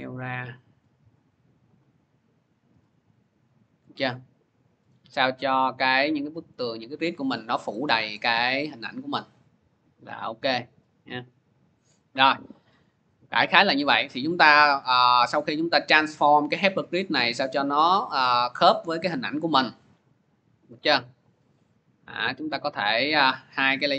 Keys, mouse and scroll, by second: 3.5 click, 4.1 scroll, 5.1-6.0 scroll, 6.4 scroll, 7.1 scroll, 8.0-9.0 scroll, 9.5 scroll, 10.0 scroll, 11.1 scroll, 15.3 click, 15.8 click, 16.4 scroll, 19.0 scroll, 21.8 middle click, 22.4-23.9 drag.